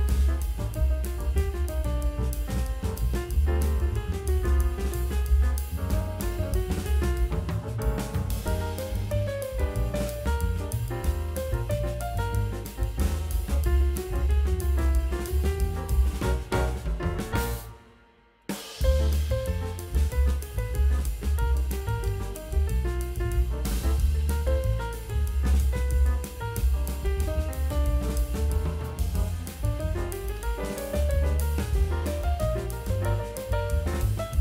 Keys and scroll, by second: 0.8 space, 0.9 space, 2.4-3.3 typing, 4.7 ctrl+space, 6.8 space, 7.1 space, 7.4 ctrl+d, 8.2 v, 8.5 ctrl+b, 9.9 ctrl+l, 11.1 space, 11.6 space, 15.5 F9, 15.7 ctrl+space, 17.4 9, 21.1 space, 21.4 space, 21.5 ctrl+d, 21.6 space, 22.4 ctrl+space, 22.4 v, 24.9 [, 28.3 [, 28.4 ctrl+alt+z, 28.9 ctrl+alt+z, 29.9 ], 32.3 ], 33.0 [, 33.6 [, 33.9 ].